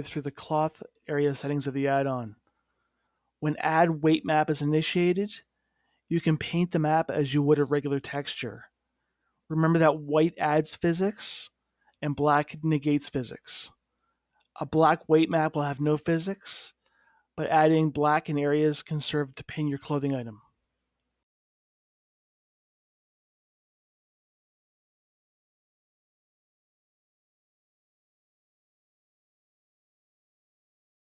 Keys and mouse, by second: 1.3 middle click, 1.9-4.1 middle drag, 4.5-6.2 drag, 8.0-9.2 drag, 9.2 middle click, 10.0 click, 12.5-14.8 middle drag, 17.3-19.3 drag, 20.3-26.3 drag, 26.8-30.3 drag, 30.3-31.1 middle drag.